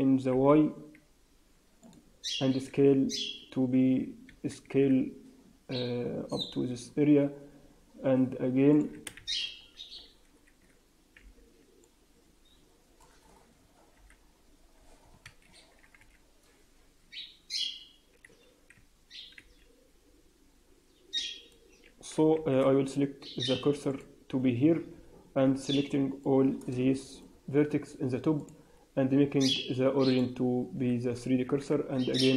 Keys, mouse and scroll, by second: 2.4 s, 4.6 s, 8.7 click, 9.1 shift+z, 9.5-9.9 scroll up 2, 10.0 alt+a, 11.1 b, 13.9 g, 15.9 a, 18.2 alt+a, 19.3 b, 22.3 shift+s, 26.5 b, 28.3 click, 31.3 s.